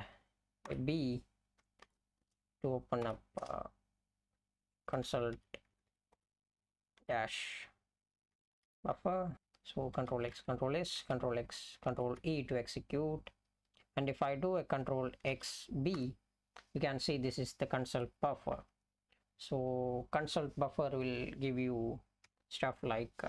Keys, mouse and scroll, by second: 0.6 b, 1.9 ", 2.2 space, 3.0 ., 3.4 space, 4.7-9.8 typing, 10.4 ctrl+s, 12.2 ctrl+e, 18.1 Down, 18.3 Down, 18.5 Down, 19.3 Up, 19.4 Up, 19.6 Up, 22.4 F11.